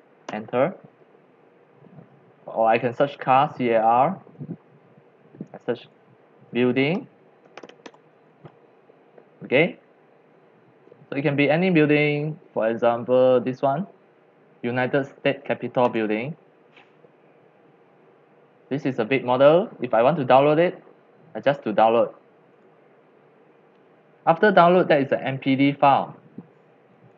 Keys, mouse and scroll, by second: 0.0-0.3 typing, 2.8-4.6 typing, 2.9 click, 5.6 click, 6.3-8.3 typing, 9.3 click, 10.3-11.4 scroll down 2, 11.4-12.6 scroll up 4, 12.6 scroll down 4, 13.3 scroll, 16.0 click, 19.3-21.1 drag, 22.5-26.4 drag, 27.0 click.